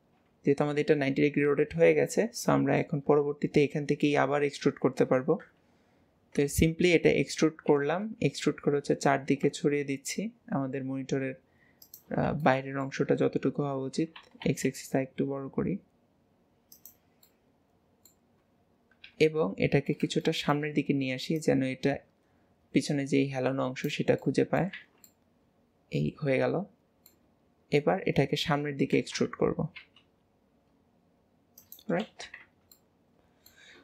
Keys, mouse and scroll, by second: 1.2 middle click, 2.3-5.6 middle drag, 5.6 KP_1, 7.7 e, 12.5 shift+middle click, 13.2-13.9 scroll up 1, 17.3 middle click, 19.1 KP_7, 21.4 click, 24.3 middle click, 24.8 alt+z, 25.1-27.8 middle drag, 27.8 KP_7, 32.8 middle click.